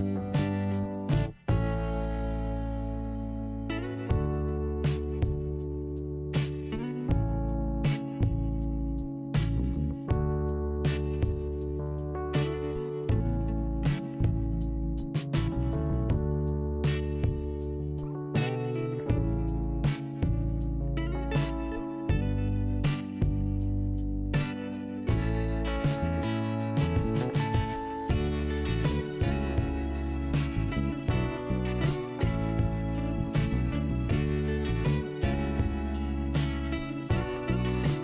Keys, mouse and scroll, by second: 0.4 click, 9.8 click, 11.0 click, 11.8 click, 12.4 click, 13.7 click, 15.5 click, 16.9 click, 18.7 click, 19.7 click, 21.2 click, 22.9 click, 23.9 click, 25.4 scroll down 1, 25.9 scroll down 1, 27.6 click, 28.0 click, 28.7 double click, 31.6 scroll down 1, 33.2 click, 34.6 scroll down 1, 35.2-35.9 scroll up 1, 36.3 click.